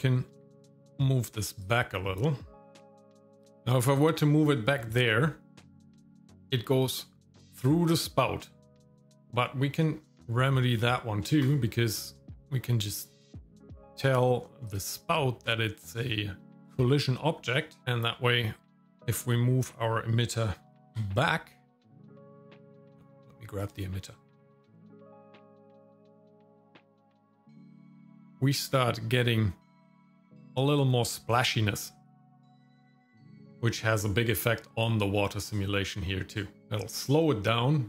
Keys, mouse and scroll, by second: 0.5 g, 2.8 g, 10.7 click, 11.4 click, 14.7 click, 16.6 click, 17.8 click, 18.9-20.8 drag, 20.8 g, 23.6 click, 24.5 g, 32.3 shift+middle click, 32.6-32.9 scroll down 3, 32.7 middle click, 33.0 shift+middle click, 33.3 middle click.